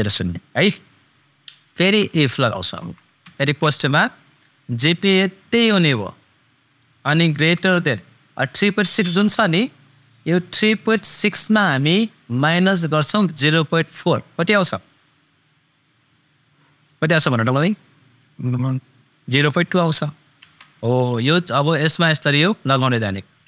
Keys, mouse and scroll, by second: 1.8 super+i, 2.8 super+f, 3.6 shift+super+9, 5.4 super+click, 7.5 shift+super+..